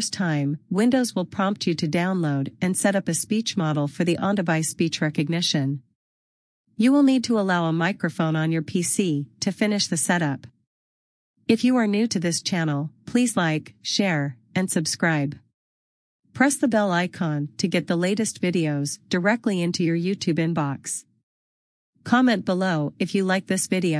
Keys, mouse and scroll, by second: 1.7 scroll down 1, 5.0-5.4 scroll down 1, 6.3 click, 19.6 click, 22.6 click, 23.3 super+u.